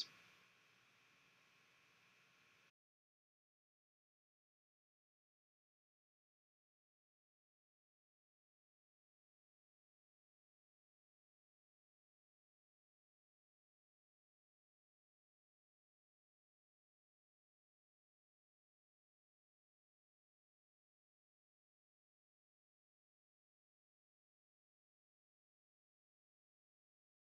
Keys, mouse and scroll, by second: 0.7 g, 2.4 r, 5.1 s, 8.0 e, 13.2 g, 15.4 r, 19.3-21.2 scroll down 3, 21.2 e.